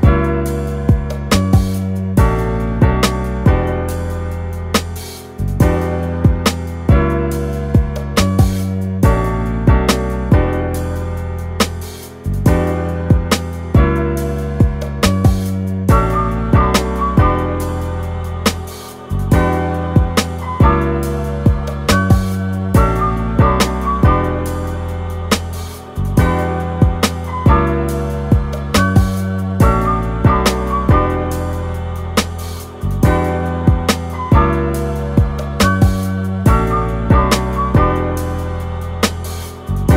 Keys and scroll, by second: 6.2 BackSpace, 8.7 super+d.